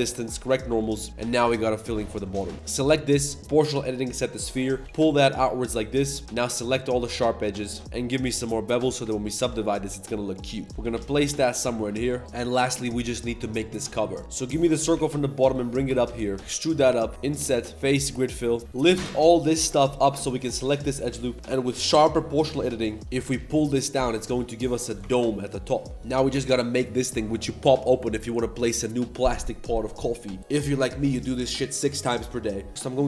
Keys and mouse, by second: 0.3 shift+n, 0.7 Tab, 0.8 click, 1.0 click, 1.1 Tab, 1.2 z, 1.4 click, 1.9 click, 2.2 click, 2.2 z, 2.5 ctrl+s, 2.5 2, 3.5-4.5 drag, 4.5 middle click, 4.8 g, 6.2-7.7 typing, 6.8 middle click, 7.4 alt+shift+click, 7.8 ctrl+b, 8.8 Tab, 9.1 ctrl+1, 9.3 ctrl+2, 9.6 click, 10.3 click, 10.6 middle click, 10.6 g, 11.5 g, 11.5 a, 11.6 a, 11.7 middle drag, 12.0 click, 14.2-17.1 typing, 17.0 click, 17.1 ctrl+z, 17.1 Tab, 17.7 click, 18.3 click, 18.6-19.2 typing, 18.9 shift+middle click, 19.2 middle click, 19.9 alt+click, 20.2 shift+middle drag, 21.0 click, 21.2-22.2 drag, 22.3 shift+middle click, 22.8 middle click, 23.1 Tab, 23.1 g, 25.0 Tab, 25.2-26.0 middle drag.